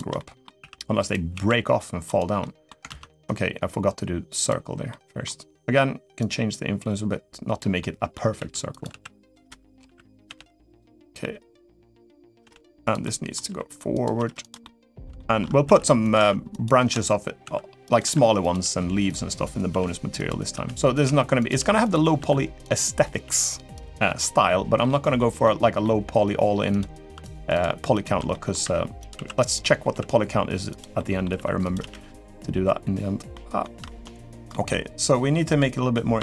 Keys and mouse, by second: 0.3 e, 1.1 s, 2.2 middle click, 3.0 ctrl+z, 4.7 middle click, 6.0-7.3 drag, 7.5 middle click, 8.1 e, 8.6 s, 9.2 middle drag, 9.6 r, 10.0 g, 11.0-11.4 middle drag, 11.7-12.1 middle drag, 12.2 g, 12.8 middle click, 13.2 r, 13.9 g, 14.4 middle click, 14.9 shift+middle click, 15.4 e, 15.9 s, 17.2 s, 17.8 r, 18.3 g, 19.5 r, 20.8 e, 20.8 s, 21.2 g, 21.9 r, 23.0 g, 23.9 middle drag, 24.6-25.0 middle drag, 25.2-25.6 middle drag, 27.0 shift+click, 27.3 shift+click, 28.1 middle click, 28.4 e, 28.9 s, 29.7 s, 30.7 middle click, 31.3 r, 31.5 g, 33.1-33.4 middle drag, 33.6 shift+middle drag, 34.3 middle click, 35.2 click.